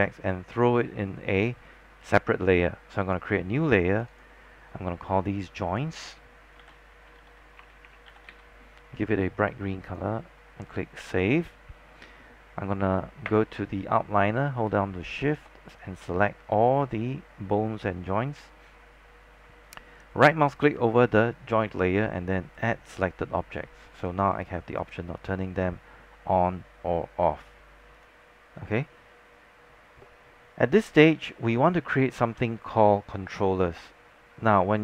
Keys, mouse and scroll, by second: 6.5-8.9 typing, 10.0-12.2 drag, 15.3 shift+click, 20.2-23.3 right drag, 24.1 click, 26.2 scroll down 1, 26.5-28.0 scroll up 1, 28.0 click, 28.7-34.8 scroll down 1.